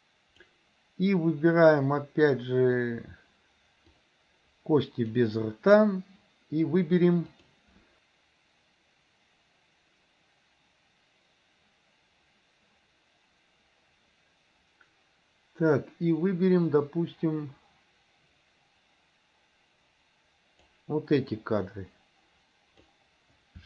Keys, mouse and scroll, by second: 4.0-5.3 drag, 7.4 click, 8.0-20.8 drag, 21.3-22.9 drag.